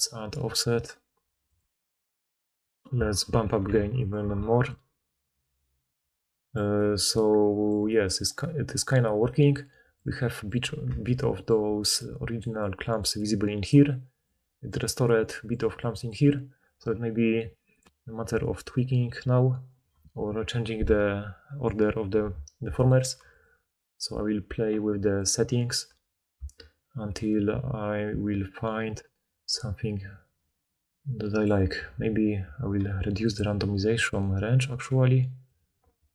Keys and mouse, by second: 4.1-10.2 right drag, 10.2-14.0 drag, 11.6-13.7 typing, 11.9-14.0 right drag, 15.6-16.8 typing, 16.8-19.8 middle drag, 19.8-20.4 middle drag, 23.4-25.1 drag.